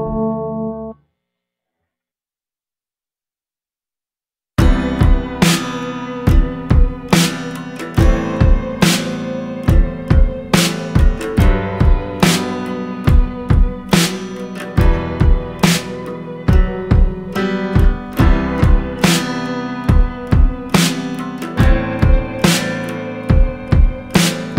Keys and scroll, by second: 2.8 c, 7.6 Up, 8.1 Up, 8.6-9.8 Up, 20.2 shift+F8, 21.0-24.2 typing.